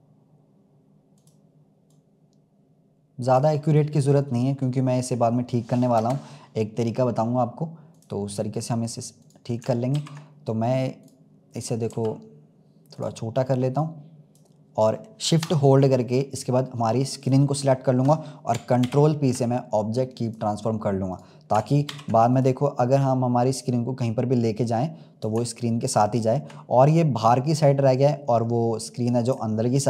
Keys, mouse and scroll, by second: 1.8 click, 3.6-4.8 middle drag, 4.8-5.5 scroll down 2, 5.9 KP_0, 6.7-8.2 scroll down 2, 8.2 click, 9.1 click, 9.9 ctrl+s, 10.2-10.9 scroll up 2, 10.9-11.8 drag, 11.8 s, 13.7 click, 17.1 shift+click, 18.8 ctrl+p, 21.0-21.8 drag, 21.8 ctrl+s, 22.2 click, 23.4 click, 26.5-27.6 scroll down 2.